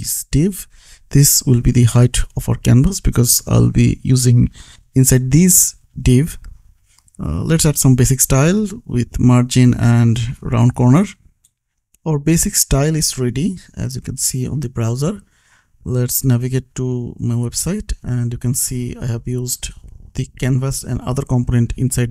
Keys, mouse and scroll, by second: 0.3 p, 1.5 Right, 1.9-3.3 typing, 4.0 Down, 5.3 Return, 7.1 click, 7.9 space, 8.4 r, 9.0 o, 10.0 Down, 10.6 Return, 11.2 ctrl+s, 12.1 click, 16.8 click, 18.9 click.